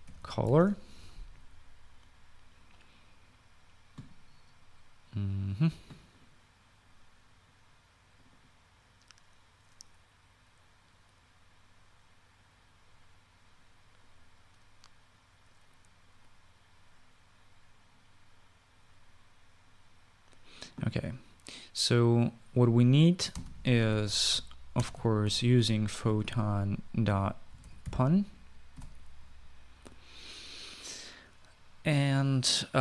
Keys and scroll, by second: 0.0-1.7 typing, 23.9-29.5 typing.